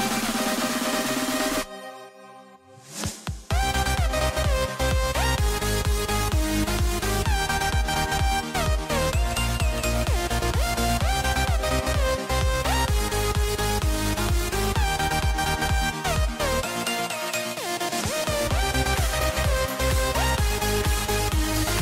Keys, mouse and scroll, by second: 2.9 e, 9.5 g, 13.0 e, 16.6 click.